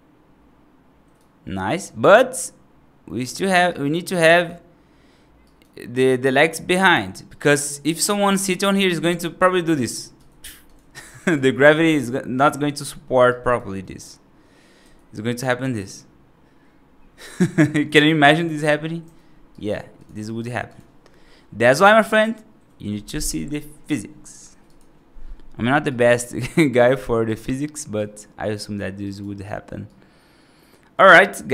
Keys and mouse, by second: 1.7-3.4 right drag, 3.5 right click, 5.3 right click, 7.1 right click, 7.9 right click, 8.2 F2, 8.7 r, 10.0 r, 11.2 ctrl+z, 13.2 right drag, 13.7 middle click, 17.6 r, 19.4 right drag, 19.8 click, 20.3 F3, 24.6 click, 25.7 right click, 26.1 right click, 26.6 right click, 27.1 right click, 27.8 right click, 28.4 right click, 28.9 right click, 29.7-30.8 right drag, 31.0 right click.